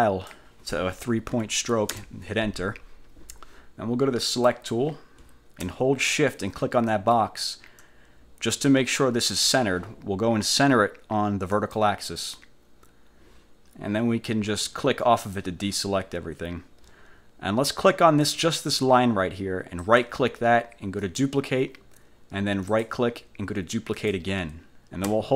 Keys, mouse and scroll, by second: 1.5 3, 2.1 Return, 4.4 click, 7.0 shift+click, 11.7 click, 15.3 click, 18.3 click, 19.9 click, 21.1 click, 22.8 click, 24.1 click.